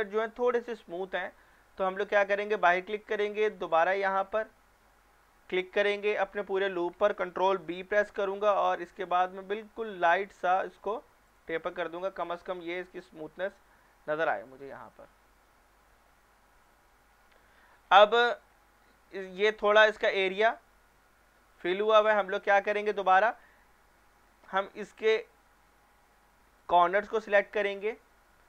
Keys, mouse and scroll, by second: 1.2 click, 3.7 alt+click, 7.7 ctrl+b, 10.1-11.3 scroll down 1, 11.3 click, 11.6 scroll down 1, 12.4 shift+middle click, 12.9 scroll down 1, 13.4 Tab, 14.2 scroll down 1, 14.5 shift+middle click, 15.2-17.0 scroll up 1, 17.1 scroll down 1, 18.1-20.7 scroll up 1, 22.0 middle click, 22.4 scroll up 1, 23.1 middle click, 23.5 Tab, 24.6 scroll up 1, 26.6 alt+click, 27.8 shift+middle click, 28.0 shift+middle click.